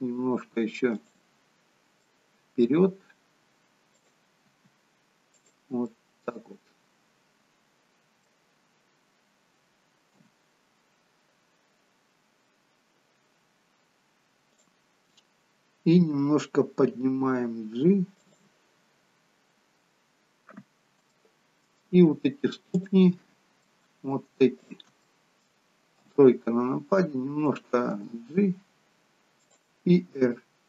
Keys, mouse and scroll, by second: 1.6-2.1 scroll up 4, 2.1 middle click, 4.0 click, 4.5 r, 5.9 middle click, 10.1 KP_3, 11.4-13.2 scroll down 5, 14.7 click, 17.1 g, 19.3-19.8 scroll up 4, 19.8-20.4 scroll down 1, 20.4-21.0 scroll down 1, 21.1 shift+middle click, 22.8 click, 23.7 middle click, 24.6 shift+click, 25.1 middle click, 26.0 KP_3, 28.0 g, 30.2 r.